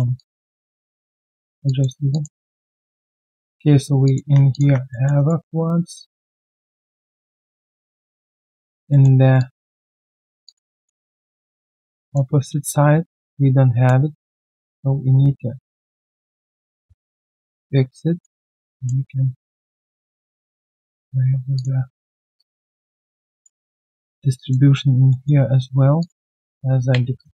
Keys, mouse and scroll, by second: 0.1 alt+click, 1.6 alt+click, 2.4 alt+middle click, 2.7 alt+click, 4.5 alt+click, 4.7 1, 4.9 alt+middle click, 5.1 alt+right click, 5.4 alt+click, 7.1 alt+click, 7.8 alt+middle click, 8.2 alt+click, 8.9 alt+middle click, 9.2 alt+right click, 9.3 alt+click, 9.9 alt+middle click, 10.2 alt+right click, 10.4 alt+click, 10.7 alt+middle click, 11.0 alt+right click, 11.3 right click, 12.3 w, 13.2 ctrl+shift+click, 14.4 ctrl+shift+click, 17.5 ctrl+shift+click, 18.7 ctrl+shift+click, 19.8 ctrl+shift+click, 23.3 alt+right click, 23.5 alt+click, 24.0 alt+middle click, 24.3 alt+click, 25.0 alt+click, 25.1 alt+middle click, 27.1 shift+click.